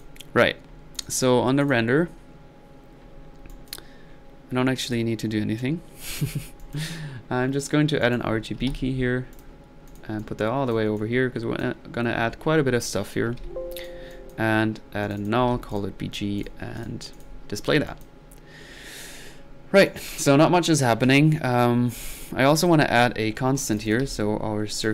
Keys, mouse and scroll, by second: 6.4 middle click, 6.8 drag, 8.0 right click, 8.6 typing, 9.3 click, 9.9-11.8 drag, 13.4 alt+n, 13.8 alt+click, 14.1 alt+click, 15.0 alt+click, 16.1 middle click, 16.4 click, 16.8-17.4 drag, 17.6 middle click, 17.9 click, 19.1 middle click, 19.9-20.2 drag, 20.5 click, 23.7-24.1 drag, 24.1 c, 24.8 drag.